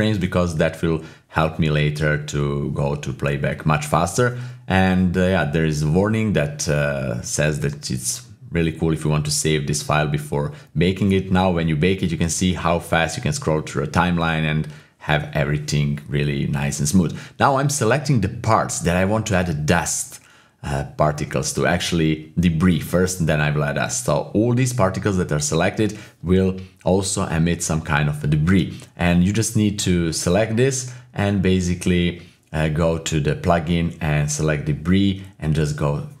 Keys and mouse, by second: 2.3-5.8 drag, 7.1 click, 7.2-9.4 typing, 8.1 click, 8.9 click, 9.4-12.6 drag, 12.6 KP_7, 13.6-14.5 drag, 14.5 typing, 16.0 ctrl+click, 17.9 middle click, 19.7-21.7 drag, 23.0 ctrl+click, 23.3 typing, 24.0-25.0 middle drag, 25.9-27.9 drag, 28.5 middle click, 29.3-30.0 middle drag, 31.0 shift+click, 31.3 typing, 32.4 ctrl+click.